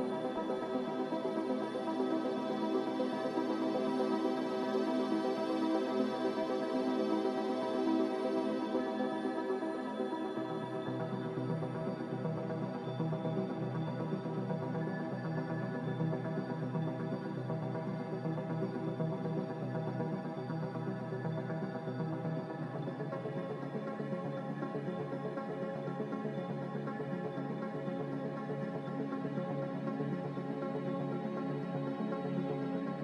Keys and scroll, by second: 1.4 ctrl+b, 8.9 a, 14.5 ctrl+c, 27.7 Delete, 28.6 ctrl+c, 32.1 m.